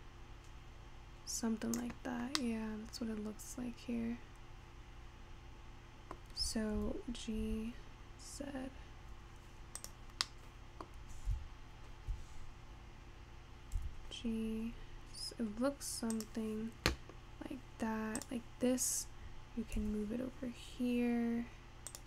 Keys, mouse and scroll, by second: 2.5-5.6 middle drag, 6.9 g, 10.2 scroll down 1, 10.3-11.4 middle drag, 13.8 g, 18.2 click, 19.8 g.